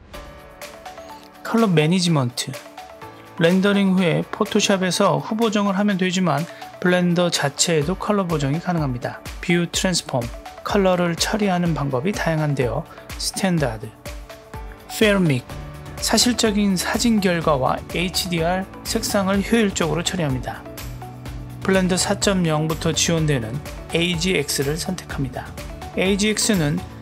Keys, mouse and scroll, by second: 1.4 click, 2.0-5.2 scroll down 1, 5.2-5.7 scroll up 1, 8.6-13.6 drag, 14.3-15.4 drag, 20.5-22.1 drag.